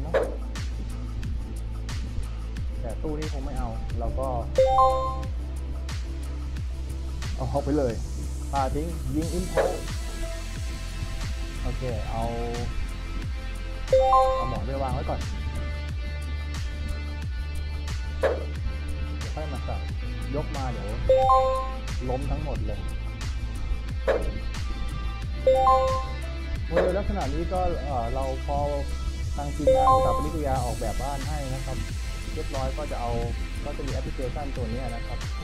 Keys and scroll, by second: 1.0 w, 4.8 w, 7.5 w, 10.7 w, 14.7 d, 15.1 w, 18.6 a, 21.9 w, 25.7 w, 27.3 a, 29.0 d, 32.2 a.